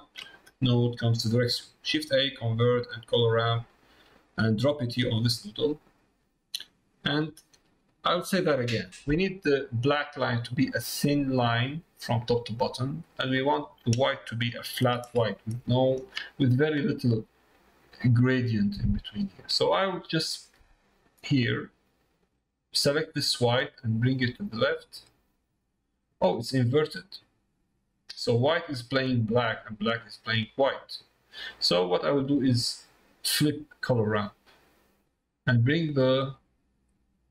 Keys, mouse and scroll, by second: 7.6 middle click, 22.5-28.4 drag, 29.8-31.4 drag, 32.6-33.8 drag, 35.4-36.8 drag.